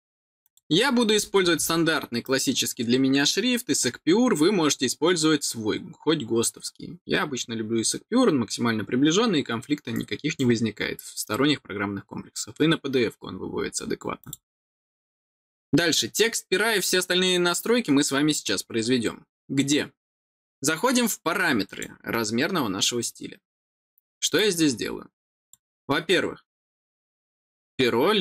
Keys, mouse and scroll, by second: 0.3 click, 2.1-3.7 drag, 14.1 click, 24.3-25.4 drag.